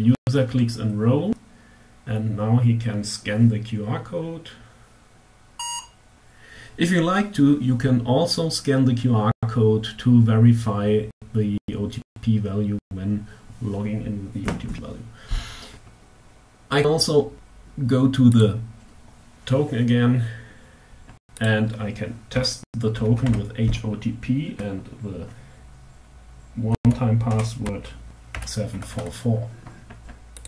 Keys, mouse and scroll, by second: 17.9 click, 20.8 click, 21.8 h, 22.3 o, 22.4 t, 22.6 p, 26.0-28.2 typing, 29.8 click.